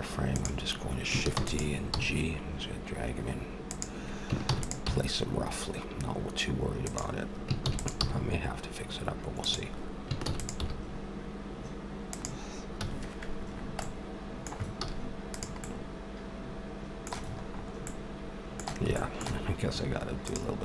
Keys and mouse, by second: 1.3 shift+d, 1.9 g, 4.4 shift+d, 4.8 g, 7.6 shift+d, 8.0 g, 10.2 shift+d, 10.6 g, 12.7 a, 13.5 middle click, 14.8 z, 20.3-20.6 drag.